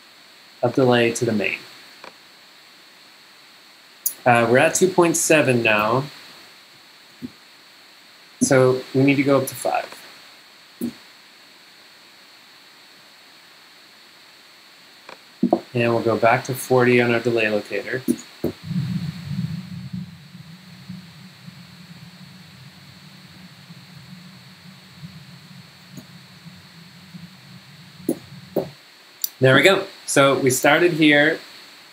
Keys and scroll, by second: 5.3 super+2, 5.6-7.8 typing, 8.5 Escape, 10.8 5, 10.9 Return, 17.6-19.7 typing, 22.0-28.6 typing, 28.1 Return.